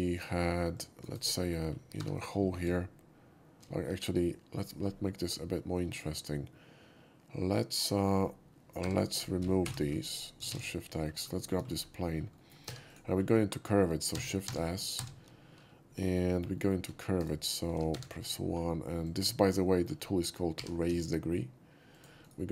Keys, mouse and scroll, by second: 0.0 shift+middle click, 0.7 shift+drag, 1.1 shift+right click, 2.0 3, 2.1 click, 3.8 2, 4.6 right click, 7.7-8.0 middle drag, 8.8 3, 9.0 click, 10.5 shift+x, 10.8 shift+middle drag, 11.4 shift+middle click, 11.6 shift+scroll up 2, 12.3 shift+middle drag, 12.6 3, 12.8 click, 13.1 scroll down 1, 14.1 shift+s, 14.5 shift+s, 15.9 middle click, 16.3 middle click, 16.6 middle click, 16.9 scroll up 1, 17.2 alt+right click, 17.9 1, 18.1 click, 19.0 click, 19.4 scroll up 1, 19.6 middle drag, 20.5 g, 21.9 click, 22.2 right click.